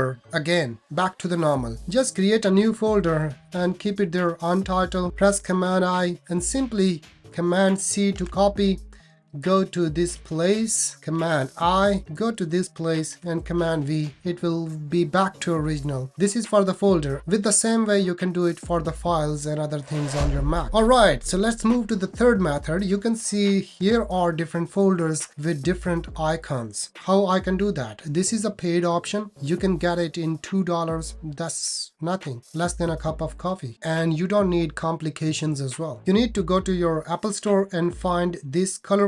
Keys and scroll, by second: 2.5 shift+super+n, 5.7 super+i, 8.2 super+c, 11.5 super+i, 13.1 super+v.